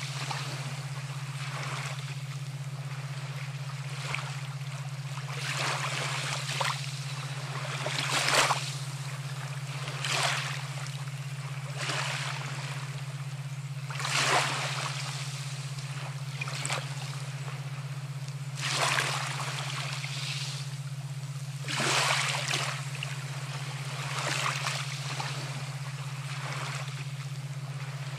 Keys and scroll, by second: 16.4 ctrl+a, 17.0 ctrl+c, 17.5 ctrl+v, 22.2 ctrl+t.